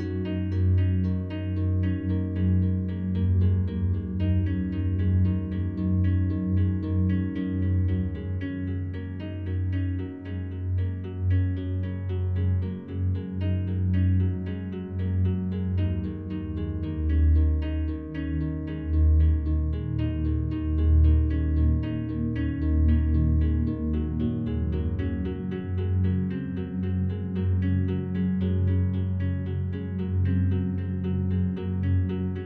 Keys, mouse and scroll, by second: 0.1 a, 1.5 typing, 1.7-3.7 alt+drag, 3.7 2, 4.9 alt+shift+right click, 6.7 2, 8.6 right click, 11.3 alt+shift+right click, 14.1 ctrl+b, 16.7 click, 17.2 a, 18.2 Tab, 19.4 alt+click, 20.2 scroll down 1, 21.2-22.6 alt+drag, 22.6 a, 22.8 a, 23.5 right click, 24.8 click, 27.1-31.1 drag.